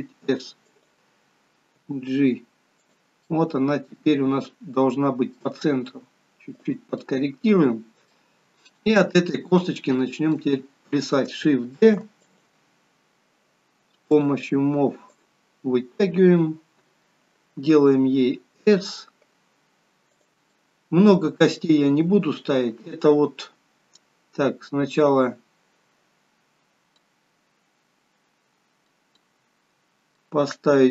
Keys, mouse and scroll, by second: 3.4 middle click, 5.9 g, 7.0 middle click, 9.1-10.0 scroll up 2, 10.0 middle click, 11.9 shift+d, 14.2 click, 15.2 click, 18.0 s, 20.7 middle click, 27.0 middle click, 29.4 middle click.